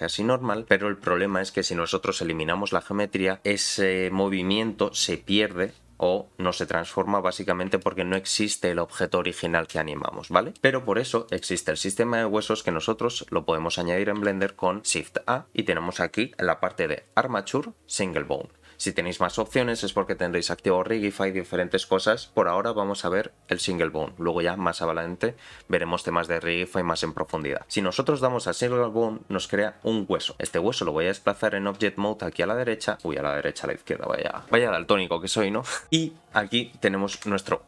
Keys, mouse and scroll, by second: 7.2-7.8 scroll down 3, 7.8 shift+middle click, 10.0-10.5 scroll up 4, 10.5 shift+middle click, 11.3 click, 14.2 shift+a, 32.8 middle click, 37.1 KP_Decimal.